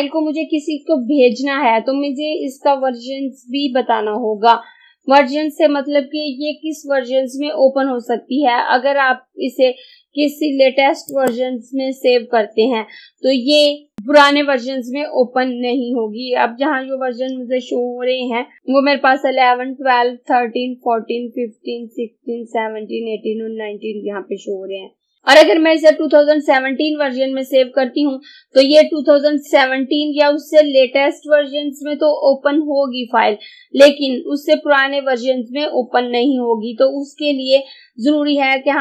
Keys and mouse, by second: 11.1 click.